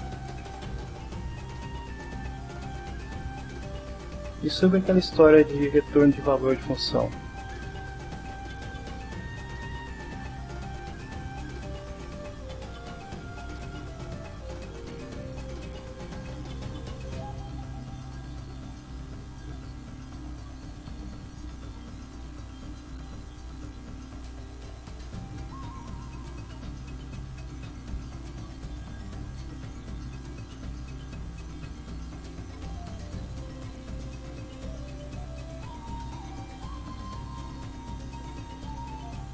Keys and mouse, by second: 0.2 click, 7.8 click, 8.9 click, 10.1 shift+l, 10.4 shift+b, 12.0 click, 13.1-16.0 drag, 16.7 click, 17.8 click, 21.4 click, 22.8 click, 24.4 click, 25.6 click, 28.2 click, 29.3 click, 30.2 click, 33.7 click, 35.2 click, 37.4 click, 38.5-39.3 drag.